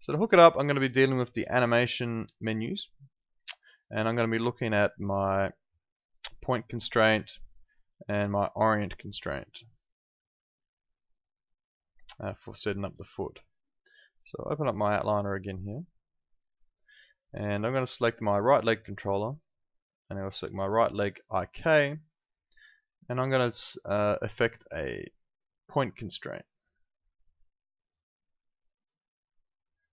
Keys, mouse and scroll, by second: 3.5 click, 14.7 click, 21.0 ctrl+click, 28.7 click.